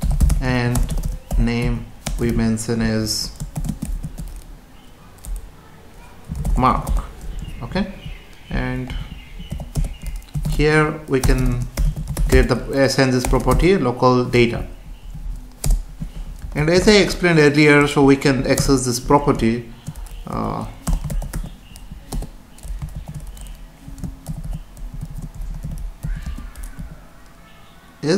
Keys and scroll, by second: 0.2 space, 0.8 BackSpace, 2.0 space, 7.5 Down, 8.9 End, 9.8 Return, 11.2 BackSpace, 12.3 space, 14.5 Down, 15.0 Up, 15.6 Return, 16.5 ctrl+s, 18.5 Return, 20.8 BackSpace, 22.1 Return, 25.6 Left, 26.2 space.